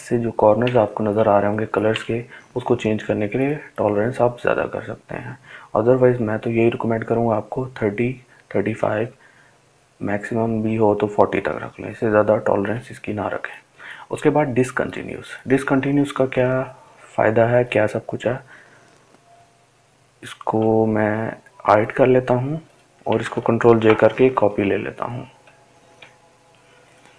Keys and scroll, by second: 25.6 ctrl+j.